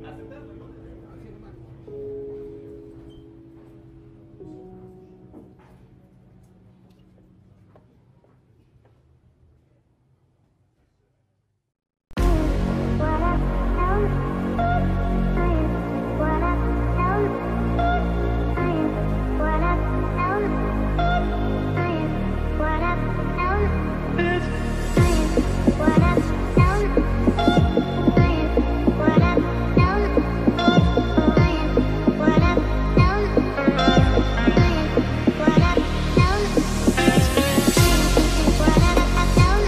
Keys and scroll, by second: 16.7 ctrl+e.